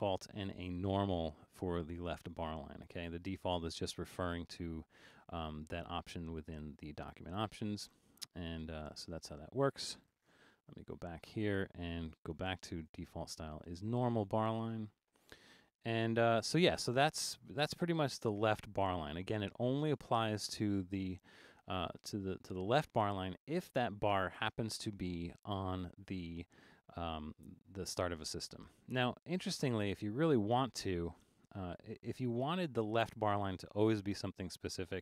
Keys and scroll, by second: 10.3 alt+super+a, 29.0 super+a.